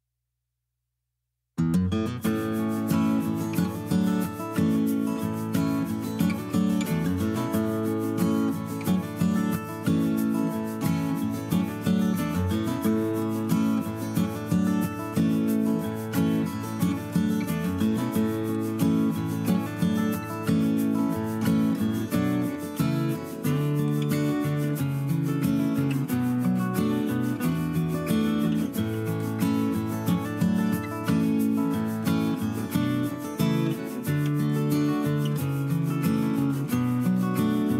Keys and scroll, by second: 8.3 ctrl+-, 22.4 ctrl+z, 24.6 ctrl+z, 31.1 ctrl+x, 31.6 ctrl+shift+v.